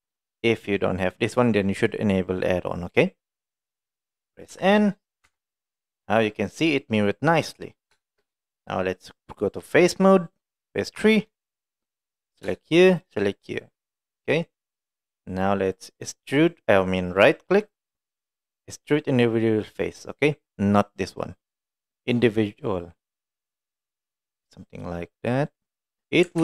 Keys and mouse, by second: 3.8 middle click, 4.6 n, 5.0 middle drag, 5.3 Tab, 5.7 middle click, 6.8 middle click, 8.1 shift+middle click, 11.1 3, 12.1 click, 13.1 shift+click, 16.7-26.0 right drag.